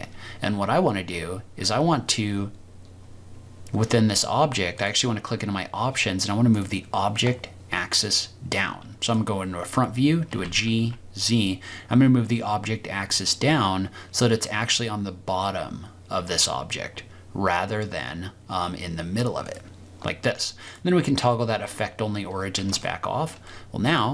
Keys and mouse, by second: 6.1 click, 10.2 g, 10.7 z, 20.8-22.0 drag, 22.9-23.3 shift+middle drag, 23.6-23.9 middle drag.